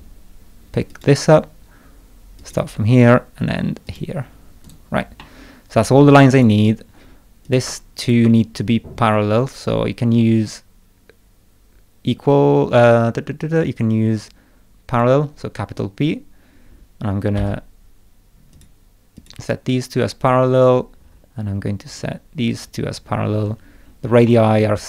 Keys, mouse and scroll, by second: 0.9 click, 2.4 click, 3.9 click, 4.6 right click, 5.2 middle click, 6.3 click, 7.4 click, 8.0 ctrl+click, 14.9 click, 17.3 p, 18.5 click, 19.1 click, 20.9-21.3 scroll up 2, 21.9 click, 22.5 click, 23.4-24.0 scroll down 4, 24.3 middle click.